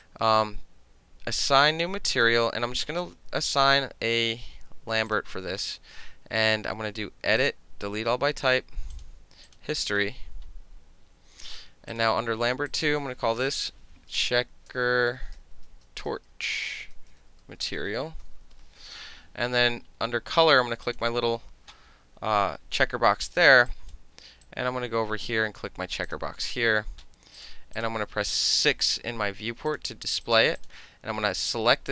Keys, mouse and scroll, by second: 0.0-2.3 alt+right drag, 5.1 click, 7.4 click, 8.4 click, 8.9 click, 9.5 click, 11.9 click, 12.7 click, 13.6-18.8 typing, 20.9 click, 23.7 click, 24.5-25.3 drag, 26.1 click, 27.4 click, 27.8 click, 29.0 5, 29.7 click, 30.3 click, 30.6 click.